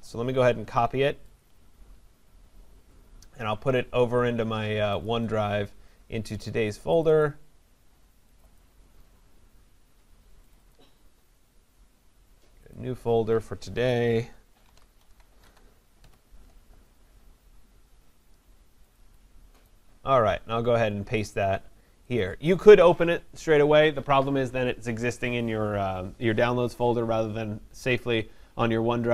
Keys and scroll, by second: 16.0 Return.